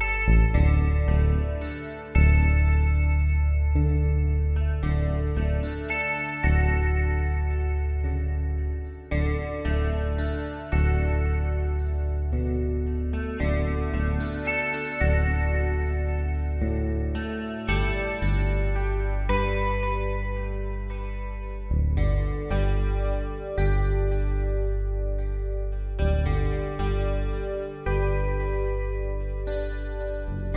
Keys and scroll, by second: 7.5 r, 8.0 e, 10.2-12.5 typing, 13.1 ctrl+z, 14.6 typing, 17.3 typing, 26.6-29.6 typing.